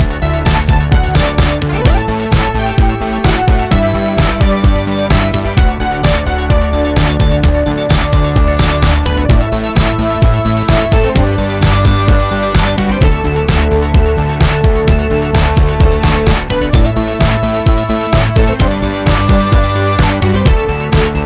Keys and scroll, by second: 4.4 g, 5.9 g, 7.9 ctrl+KP_1, 18.9 g.